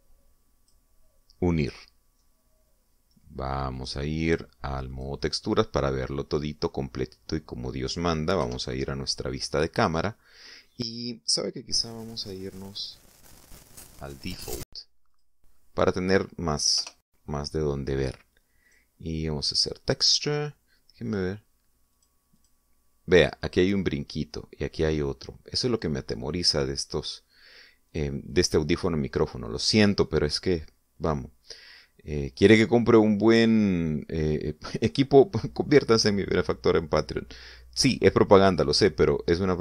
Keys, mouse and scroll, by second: 4.8 click, 5.9 click, 8.0 scroll down 1, 9.4 0, 15.0 click, 16.1 click, 17.8 o, 19.7 click, 20.6 click, 22.1 click, 23.0 click, 23.4 click, 27.4 click, 28.9 click, 29.3 click, 31.0-31.6 scroll up 4, 32.3 scroll up 2, 33.3 scroll down 2.